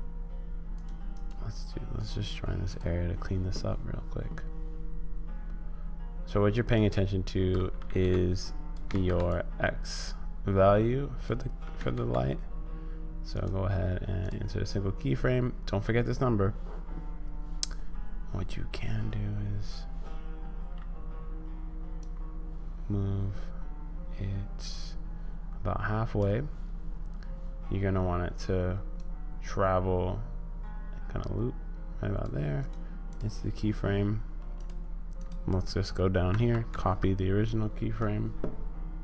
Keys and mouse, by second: 1.3-2.8 drag, 6.9 click, 7.8 ctrl+z, 8.4 click, 8.9 ctrl+z, 9.3-11.2 drag, 11.8 ctrl+z, 13.5 click, 22.1-26.2 drag, 29.0-32.4 drag, 32.7 click, 34.5 click, 35.2 click, 36.3 ctrl+c.